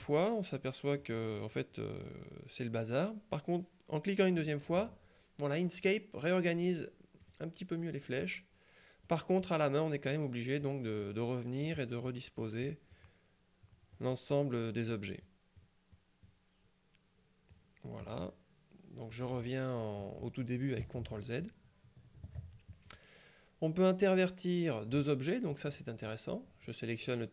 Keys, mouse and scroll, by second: 0.7 middle click, 4.5 click, 7.3 click, 9.2 click, 10.2 click, 12.2 click, 13.0-14.5 drag, 15.0 click, 16.3 click, 21.1 ctrl+z, 23.0 click, 25.8 click.